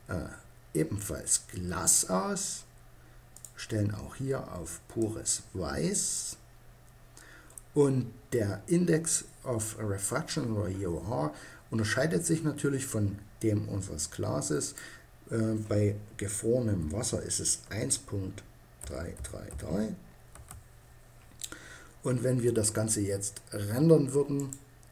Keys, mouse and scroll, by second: 2.9-4.8 drag, 14.2-16.1 drag, 16.1 middle click, 23.9-24.9 drag.